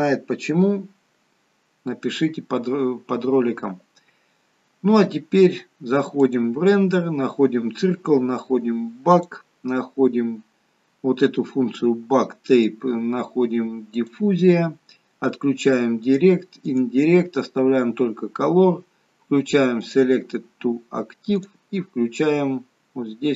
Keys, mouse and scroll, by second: 6.3 click, 7.9-9.2 scroll down 2, 9.2 click, 9.2-10.3 scroll down 2, 10.3-11.0 scroll down 3, 12.6 click, 16.2 click, 16.8 click, 19.9 click, 21.5 click.